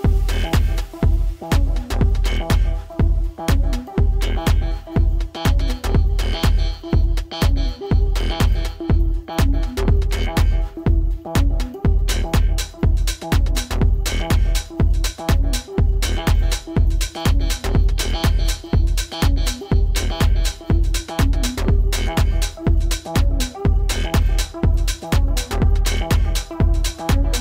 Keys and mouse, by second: 4.6-6.0 drag, 6.4-7.1 alt+drag, 8.7 r, 9.6-12.3 drag, 12.8-14.3 alt+drag, 14.8-16.0 alt+drag, 18.1 click, 19.3 click, 21.9 alt+click, 25.2 click, 27.3 click.